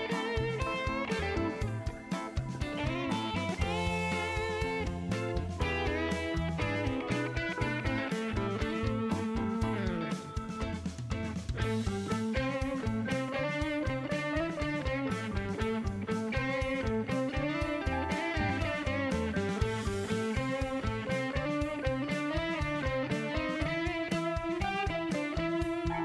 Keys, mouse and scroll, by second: 3.6 shift+right click, 7.2 click, 9.7 click, 11.5 click, 12.0 click, 13.3 click, 14.3 scroll down 2, 14.7 middle click, 15.1 shift+right click, 15.8 shift+middle click, 16.7 middle click, 17.5 shift+right click, 18.9 shift+middle click, 19.6 scroll up 2, 20.0 shift+right click, 22.5 click.